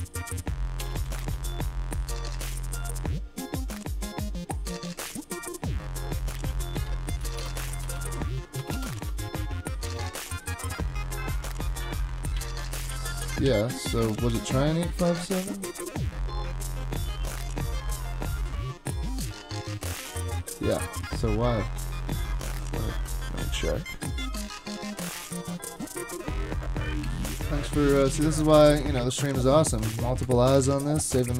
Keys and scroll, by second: 0.0-1.5 typing, 7.2-9.5 typing, 9.9 Return, 11.6-12.4 typing, 12.9 ctrl+c, 13.5 ctrl+c, 14.3 shift+super+{, 28.5 super+Tab, 29.8 super+Tab, 30.2 super+Tab.